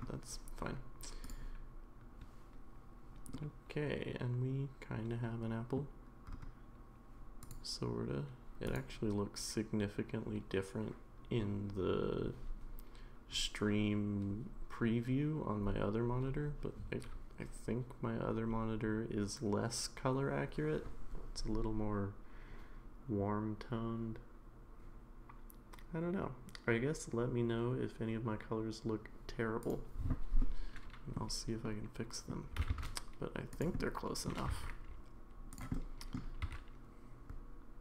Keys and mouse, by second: 3.3-5.8 middle drag, 8.6 click, 30.4-31.2 middle drag, 31.7-32.3 middle drag, 32.5 g, 33.8 middle click, 34.5 g, 35.7 middle click, 37.5 r.